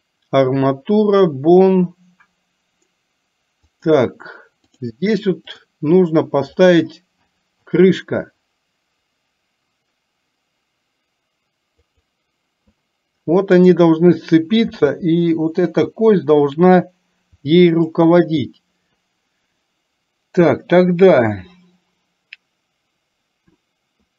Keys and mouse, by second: 5.7-12.1 drag, 13.7 click, 14.7 r.